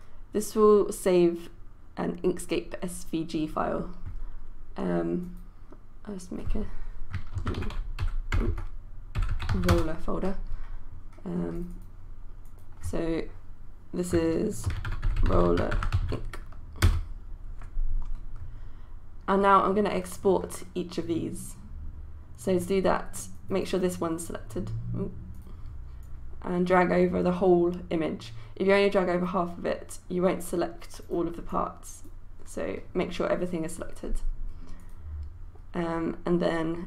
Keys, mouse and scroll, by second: 7.2-10.2 typing, 11.6 click, 14.5-16.6 typing, 16.9 Return, 23.4-36.8 drag.